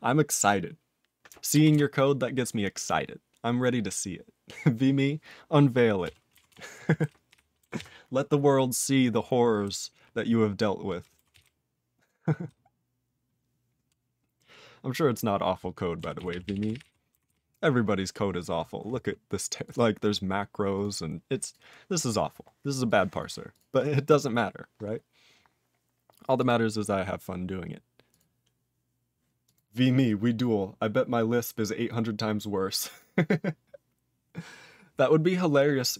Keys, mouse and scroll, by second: 1.7 ctrl+s, 6.0 ctrl+a, 6.5 ctrl+s, 7.0 ctrl+n, 7.3 ctrl+p, 7.8 ctrl+s, 9.6-11.0 ctrl+n, 11.3 ctrl+s, 11.4-12.5 ctrl+n, 16.2 ctrl+s, 16.3 ctrl+p, 16.5 ctrl+p, 16.6 ctrl+p, 16.7 ctrl+p, 16.8 ctrl+e, 17.3 ctrl+s, 17.3-18.1 ctrl+p, 19.6 click, 19.7 click, 20.7 click, 20.8 click, 22.5-22.9 scroll down 3, 22.9 click, 23.2 click, 23.5 click, 23.6 click, 23.8-24.3 scroll down 6, 25.4 scroll up 10, 26.4 click, 26.9 scroll up 2, 28.1 click, 28.2 click, 29.4 click, 29.5 click.